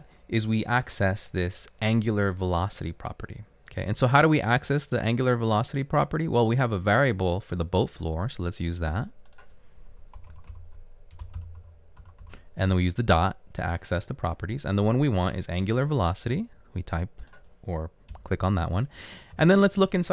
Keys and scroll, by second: 10.0-13.2 typing, 18.2 Return, 19.4 ..